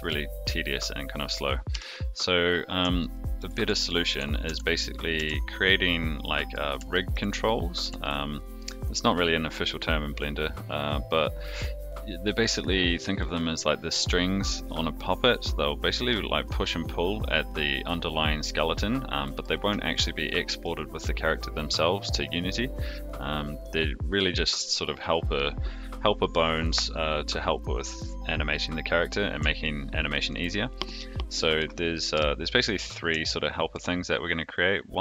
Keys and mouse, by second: 1.7 KP_3, 3.0-3.4 shift+middle drag, 3.6 a, 4.4 alt+r, 5.1 alt+g, 5.6-6.5 middle drag, 6.9 shift+middle drag, 7.4-7.7 middle drag, 8.0-8.6 shift+middle drag, 12.2-13.2 middle drag, 17.3 click, 18.9-19.4 middle drag, 19.9-20.6 shift+middle drag, 29.6-30.3 shift+middle drag, 30.8-31.6 middle drag, 32.1 KP_3, 33.2-33.7 shift+middle drag.